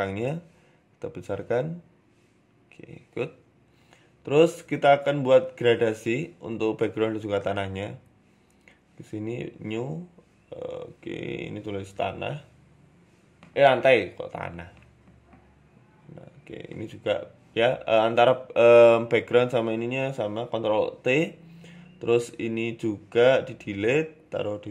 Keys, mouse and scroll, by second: 0.1 s, 1.0 KP_0, 1.8 s, 2.8 scroll down 4, 5.1 click.